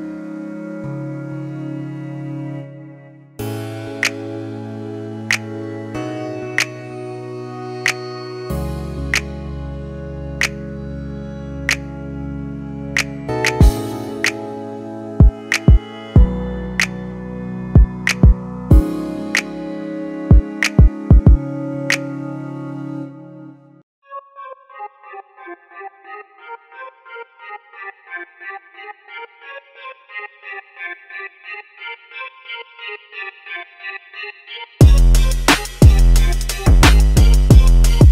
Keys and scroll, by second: 33.5-34.7 typing, 36.2-37.2 typing.